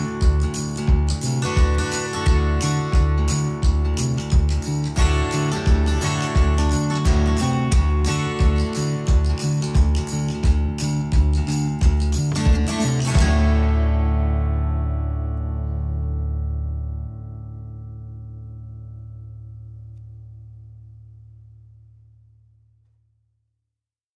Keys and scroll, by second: 8.8 Escape, 15.0 space, 18.7 Return, 19.4-23.2 typing, 23.3 Escape.